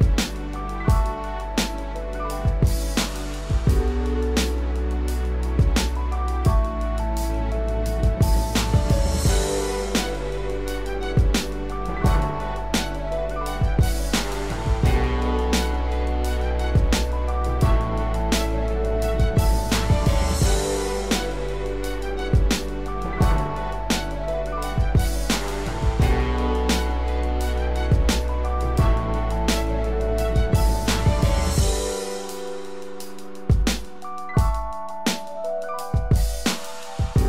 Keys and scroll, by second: 6.9 ctrl+z, 10.4 ctrl+Return, 15.8 ctrl+d.